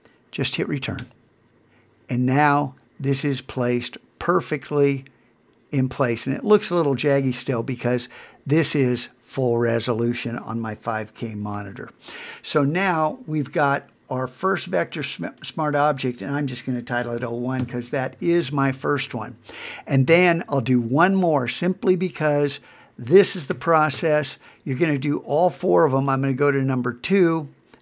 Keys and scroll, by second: 7.5 super+1, 11.5 super+=, 20.1 super+Tab, 23.5 super+w.